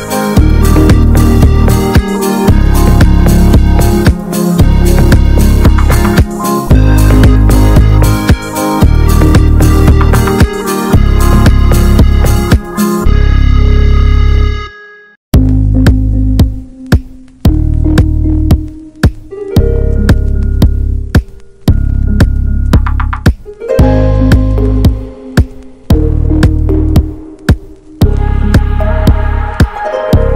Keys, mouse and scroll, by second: 0.1 Tab, 0.2 Tab, 0.4 click, 0.7 l, 1.4 click, 2.4 Tab, 2.4 click, 2.5-3.1 scroll down 7, 2.7 alt+middle click, 3.1 click, 3.4 ctrl+s, 3.6 scroll up 4, 3.8 ctrl+s, 4.2 Tab, 4.6 Tab, 5.0 ctrl+s, 5.2 scroll down 3, 5.4 shift+middle click, 5.9 ctrl+s, 5.9 ctrl+click, 6.5 ctrl+a, 6.9 click, 7.1 ctrl+s, 7.3 click, 7.5 Tab, 7.8 scroll up 1, 8.0 alt+z, 8.4 alt+z, 8.8 scroll down 3, 9.0 Tab, 9.1 click, 9.3 shift+middle click, 9.9 Tab, 10.1-10.6 scroll up 1, 10.6 ctrl+r, 11.2 s, 12.1 click, 12.9 ctrl+z, 13.0 ctrl+z, 13.7 click, 14.2 s, 15.7 scroll down 2, 15.9 ctrl+z, 16.3 click, 16.7 s, 17.3 alt+z, 17.5 scroll up 1, 17.6 alt+z, 17.9 click, 18.4-18.9 scroll up 1, 18.9 click, 19.5 ctrl+z, 19.7 click, 20.6 s, 21.4 alt+z, 21.7 shift+middle click, 21.9 alt+z, 22.1 scroll down 1, 22.3 click, 23.2-24.6 drag, 24.6-25.2 scroll up 1, 25.2 s, 25.9 alt+z, 26.1 scroll down 3, 26.3 click, 26.5-26.8 scroll up 1, 26.8 ctrl+s, 27.0 ctrl+s, 27.1 scroll up 1, 27.3 alt+middle click, 27.5 alt+middle click, 28.1-28.7 scroll up 2, 28.3 ctrl+s, 28.7 scroll down 4, 28.9 ctrl+s, 29.2 shift+a.